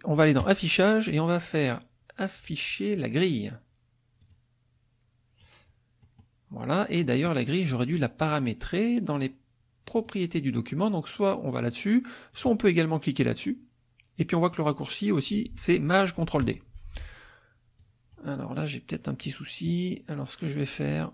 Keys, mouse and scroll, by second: 0.4 click, 4.2 click, 6.0 click, 10.0 click, 12.3 click, 16.4 click, 17.8 click.